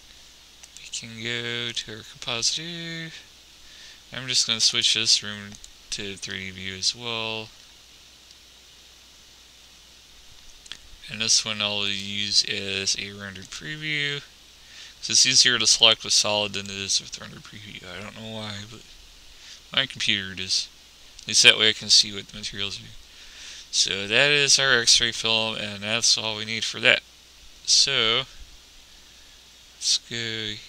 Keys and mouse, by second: 0.0 Escape, 1.2 click, 11.7-14.6 drag, 15.2-19.1 drag, 20.6 middle click, 21.5-27.6 drag.